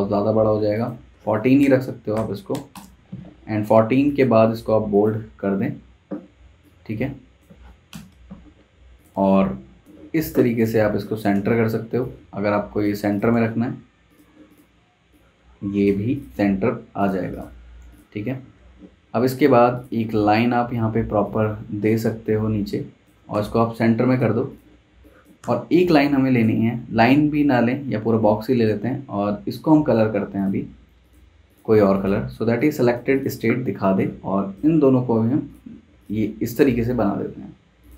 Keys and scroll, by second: 1.1 1, 1.6 5, 2.1 BackSpace, 2.5 4, 2.7 Return, 7.9 shift+super+], 10.8 z, 11.3 v, 23.3 v, 24.6 z, 25.4 v.